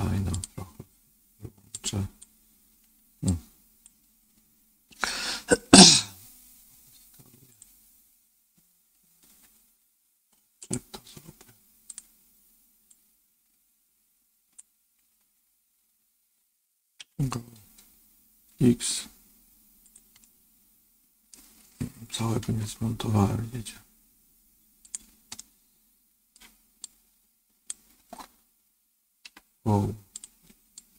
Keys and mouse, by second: 0.3 click, 1.8 click, 3.3 click, 5.9 s, 10.6-11.9 drag, 12.9-14.5 drag, 16.9 g, 20.1-21.3 middle drag, 22.4 ctrl+z, 25.3 middle click, 26.7 click, 29.2 g, 30.7 click.